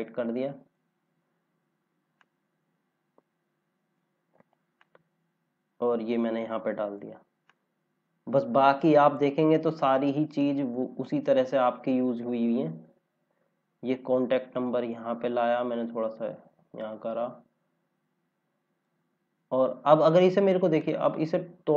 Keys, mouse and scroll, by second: 7.8 scroll down 1, 10.2 click, 12.4 scroll down 1, 15.6 click, 21.2-21.7 scroll up 1.